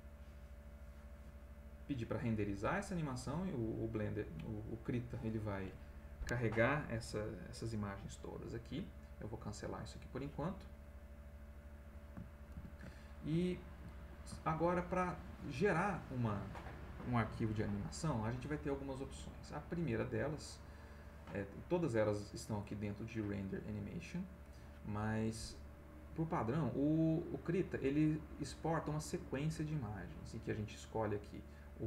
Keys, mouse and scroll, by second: 9.0 click, 10.4 middle click, 12.5 ctrl+shift+a, 13.0-14.3 ctrl+shift+middle drag, 14.9 ctrl+middle click, 14.9-15.3 ctrl+scroll up 1, 19.9 click, 24.0 click, 25.7 click, 27.0 click.